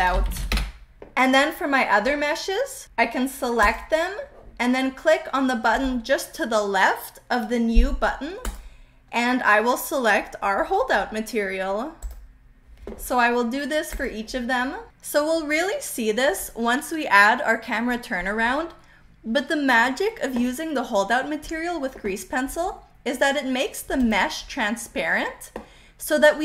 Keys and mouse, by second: 8.4-12.2 drag, 13.9 click, 23.9 click.